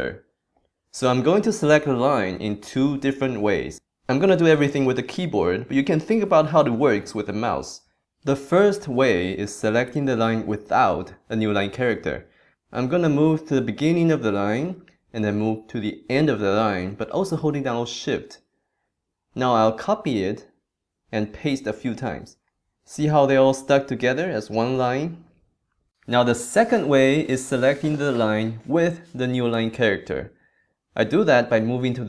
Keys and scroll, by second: 14.0 super+Left, 18.3 shift+super+Right.